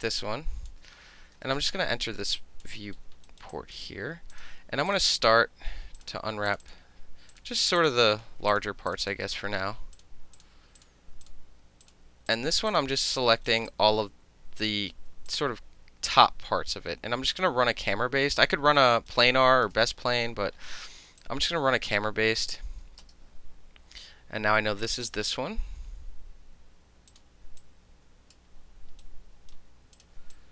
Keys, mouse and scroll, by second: 0.1-0.6 alt+drag, 1.4 space, 2.4 alt+click, 3.3 alt+right click, 3.5 alt+click, 4.3 alt+click, 4.4-4.9 shift+middle drag, 4.9 shift+click, 4.9 shift+middle click, 5.0 shift+click, 5.1-6.5 shift+middle drag, 6.0 shift+click, 6.5 shift+click, 6.5 shift+middle click, 6.6 shift+click, 6.7-7.3 shift+middle drag, 7.3 shift+click, 7.4 shift+middle drag, 7.6 shift+click, 7.7 shift+middle click, 7.8 shift+click, 7.9-8.5 shift+middle drag, 8.5 shift+click, 8.6 shift+middle click, 8.9 shift+click, 9.0 shift+click, 9.1-9.9 shift+middle drag, 9.9 shift+click, 10.0 shift+middle click, 10.3 shift+click, 10.4-12.3 shift+middle drag, 10.8 shift+click, 11.2 shift+click, 11.8 shift+click, 12.3 shift+click, 12.7 shift+click, 13.1 shift+click, 13.5 alt+right click, 13.7 alt+click, 15.1 alt+middle click, 15.3-18.4 alt+drag, 18.4 alt+middle click, 18.8 alt+middle click, 18.8 alt+right click, 19.1 alt+middle click, 19.2 alt+click, 19.6-21.2 alt+middle drag, 19.8 space, 21.2-22.4 drag, 23.0 space, 24.8 click, 27.1 click, 27.6-28.3 drag, 29.0-29.5 right drag, 30.0 click, 30.3 alt+click.